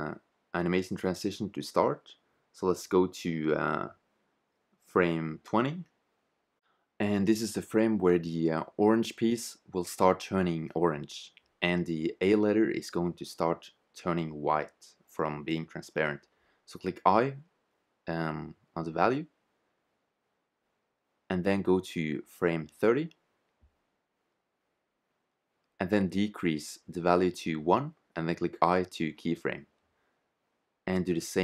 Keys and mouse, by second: 1.3-3.2 drag, 6.3-8.1 drag, 12.2 shift+z, 13.4 click, 16.9 i, 18.7 middle click, 19.6 i, 23.4-25.0 middle drag, 26.9-28.8 drag, 28.7 i, 30.4-31.4 drag.